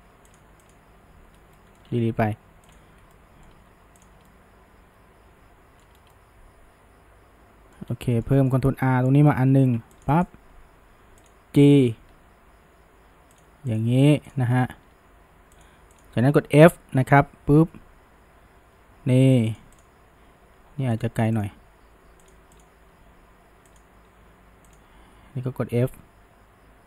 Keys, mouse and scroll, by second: 0.3 click, 0.7 shift+click, 1.6 middle click, 2.2 Delete, 3.2-4.0 shift+middle drag, 4.0 click, 4.3-6.0 shift+middle drag, 6.0 scroll down 1, 6.1-7.9 middle drag, 7.9 scroll up 1, 8.2-9.5 shift+middle drag, 9.5 ctrl+r, 10.2 right click, 11.2 click, 12.1 g, 13.7 click, 14.3 click, 14.8 g, 16.0 drag, 17.0 f, 19.8 click, 20.6 g, 21.4 click, 21.6 g, 22.6 click, 22.9 g, 24.7 click, 25.9 f.